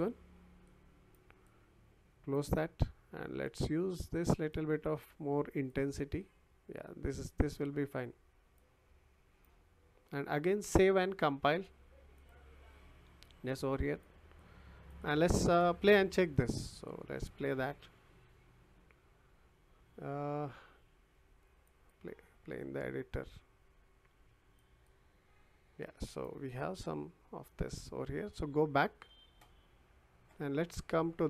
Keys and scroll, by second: 24.2 w, 28.3 w, 30.5 w.